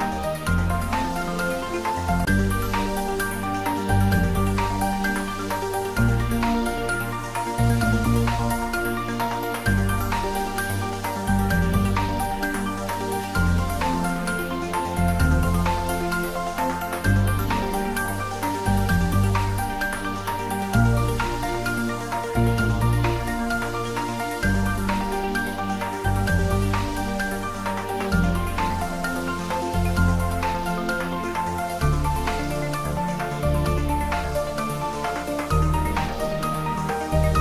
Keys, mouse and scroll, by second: 3.8 click, 4.8 g, 6.0 click, 8.9 shift+d, 11.5 click, 12.2 r, 16.5 click, 17.1 g, 27.8 click, 34.2 click.